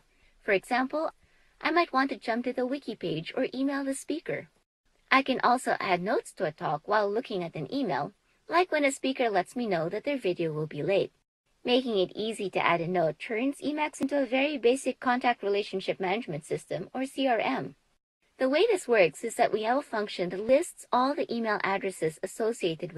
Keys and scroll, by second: 0.3 Up, 0.7 Up, 1.1 Up, 1.5 Up, 1.7-3.9 typing, 4.3 super+s, 11.5 alt+x, 11.7 Down, 11.7-15.9 typing, 16.1 Return, 16.2 Page_Down, 16.4 Down, 16.7 Down, 16.8 Down, 17.0 Down, 17.5 Down, 17.6 Down, 17.8 Down, 17.9 super+s.